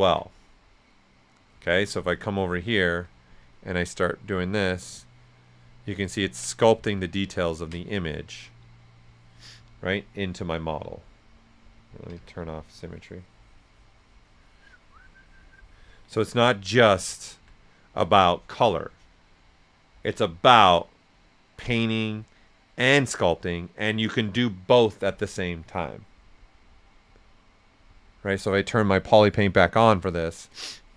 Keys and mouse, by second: 0.0-0.5 typing, 1.4 alt+right click, 3.4-6.4 drag, 5.9 right click, 7.1 ctrl+right click, 7.8 alt+right click, 10.4-11.8 drag, 11.8 ctrl+z, 12.1 ctrl+x, 12.6-15.9 drag, 15.9 alt+right click, 16.5 right click, 29.6 click, 30.8 alt+right click.